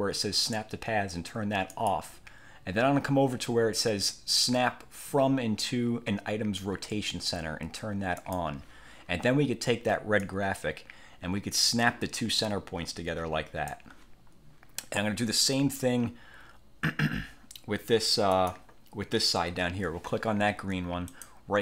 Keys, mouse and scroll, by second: 1.8 click, 8.3 click, 10.3-14.0 drag, 18.4 click, 21.2 right click.